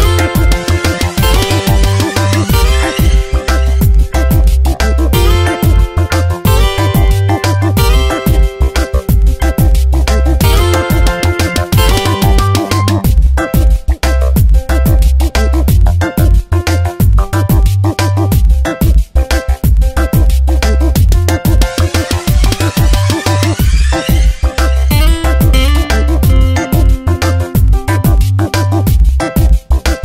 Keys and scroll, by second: 5.2 space, 9.3 space, 10.1 Tab, 14.4 space, 19.8 space, 21.4 space, 23.3 space, 28.6 1.